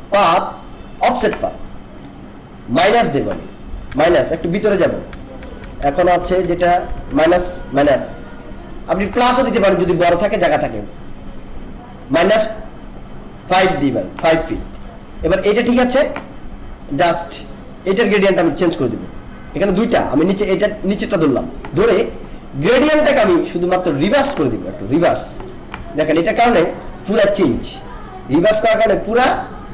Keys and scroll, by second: 3.9 Down, 9.0 Up, 9.7 Down.